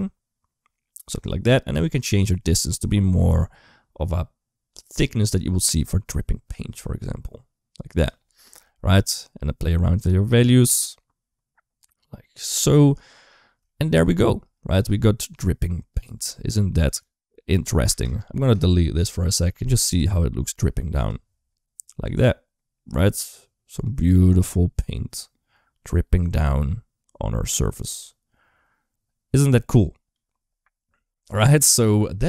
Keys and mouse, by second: 2.0-7.9 drag, 8.2 middle click, 9.0-12.4 drag, 13.5 shift+middle click, 14.6 space, 15.8 click, 17.7 space, 17.8 click, 18.8 typing, 20.3 space, 20.9 drag, 22.0 g, 31.5 space.